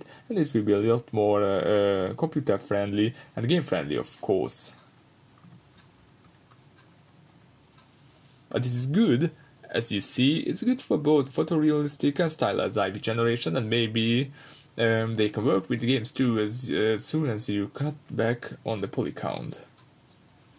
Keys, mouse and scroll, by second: 0.1 scroll up 1, 0.6 scroll down 1, 3.4-3.7 scroll up 1, 4.0 scroll up 1, 4.7 shift+f, 9.2-9.7 drag, 9.7 g, 10.7 click, 10.9 scroll up 1, 11.3-11.9 middle drag, 11.9 click, 12.2-15.2 middle drag, 13.2 g, 14.0 Escape, 15.2 click, 17.0 click, 17.7-19.6 drag.